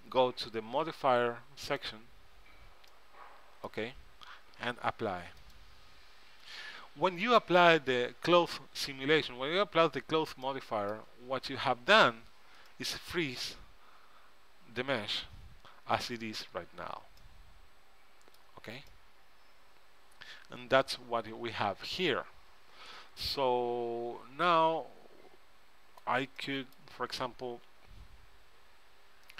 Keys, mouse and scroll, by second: 1.8-3.5 drag, 3.0 middle click, 5.6-7.4 drag, 10.6-12.2 middle drag, 12.2 Tab, 12.8 middle click, 14.3 middle click, 16.3 Tab, 16.7 Tab, 17.0 Tab, 18.6 Tab, 26.5-27.8 middle drag, 27.8 z, 28.0 middle click, 28.7 KP_3.